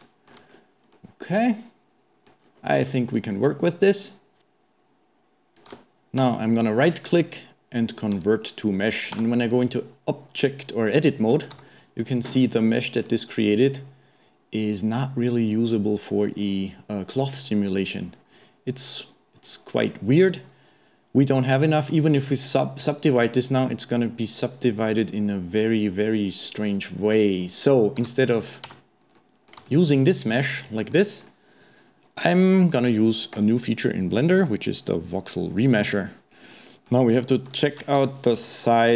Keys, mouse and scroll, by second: 0.5-0.9 scroll up 2, 0.9-2.1 middle drag, 2.5-2.8 scroll down 3, 2.8-3.1 scroll up 1, 3.1-4.4 middle drag, 4.4-6.1 shift+drag, 6.1 middle click, 6.2-8.8 right drag, 8.8-9.1 scroll up 1, 9.1 Tab, 9.5-11.6 middle drag, 11.6 a, 12.0-16.1 middle drag, 26.6-28.0 middle drag, 28.0 a, 28.7 Tab, 29.1-30.0 middle drag, 30.0-30.4 scroll down 2, 30.4-30.9 scroll up 1, 30.9-33.3 middle drag, 33.3-36.3 drag, 36.5-38.0 middle drag, 38.0 KP_1, 38.7-38.9 shift+middle drag.